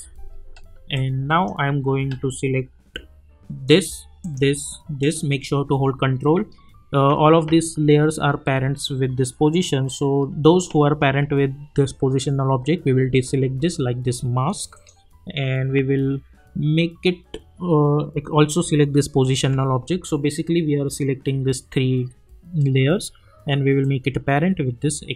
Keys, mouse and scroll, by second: 0.9-3.6 drag, 4.2 ctrl+click, 8.5 ctrl+click, 14.7 ctrl+click, 18.1 ctrl+click, 19.2 ctrl+click, 23.8-25.1 drag.